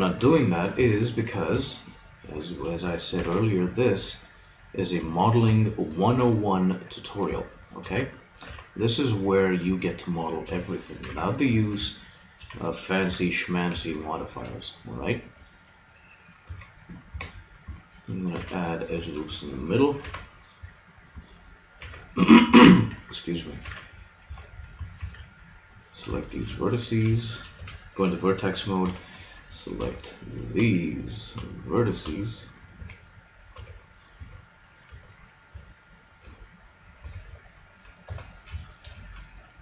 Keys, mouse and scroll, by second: 0.2 ctrl+r, 3.2 ctrl+r, 5.2-6.9 drag, 6.1 ctrl+r, 8.4 ctrl+r, 10.2-11.9 drag, 11.0 ctrl+r, 13.0 ctrl+r, 16.4 ctrl+r, 18.4 ctrl+r, 20.0 ctrl+r, 21.8 ctrl+r, 23.6 ctrl+r, 25.0 ctrl+Tab, 27.6 a, 28.8-34.2 typing, 35.5 b, 36.2 b, 37.0 b, 38.6 middle click.